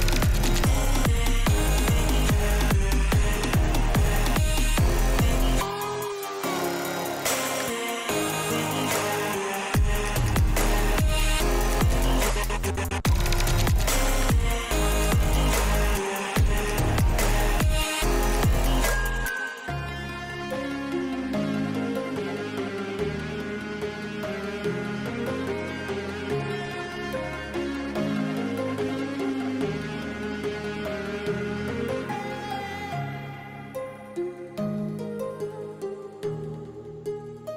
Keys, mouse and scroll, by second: 1.2 shift+middle click, 2.1-3.2 drag, 5.6 Tab, 6.7 shift+middle click, 8.2 shift+middle click, 9.8 alt+click, 10.6 shift+a, 11.5 shift+middle click, 14.5-16.0 drag, 17.9-19.6 drag, 20.9 shift+middle click, 24.5 alt+shift+click, 31.6 alt+shift+click, 35.7 click, 36.2 ctrl+click, 37.0 g.